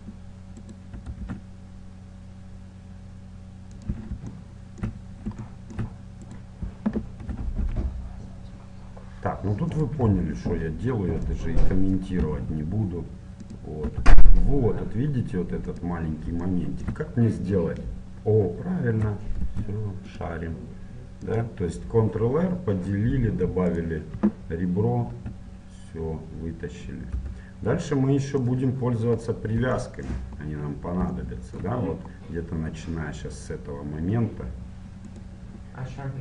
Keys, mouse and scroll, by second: 0.6-2.7 right drag, 1.0 e, 4.4-6.3 middle drag, 6.3-8.1 right drag, 7.4 e, 10.2-11.4 middle drag, 11.4-13.1 drag, 12.4 e, 14.0 e, 16.5-20.8 middle drag, 19.6 ctrl+r, 23.7-25.5 right drag, 25.1 e, 28.9-34.2 middle drag, 35.1-36.2 right drag, 35.7-36.2 middle drag.